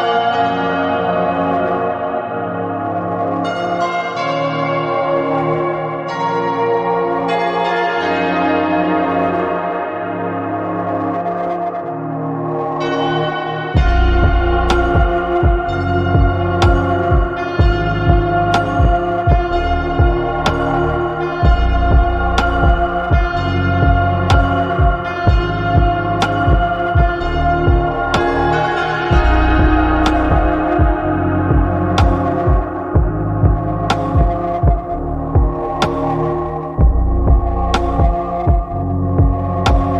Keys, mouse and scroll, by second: 0.6-2.8 middle drag, 4.9-6.6 drag, 9.2 click, 10.7 click, 13.9-15.0 drag, 16.0-17.5 middle drag, 19.2-21.3 drag, 22.2 click, 23.4-25.9 drag, 28.0 click, 28.1-30.1 middle drag, 30.1 click, 32.0 click, 32.8-33.2 middle drag, 34.5 click.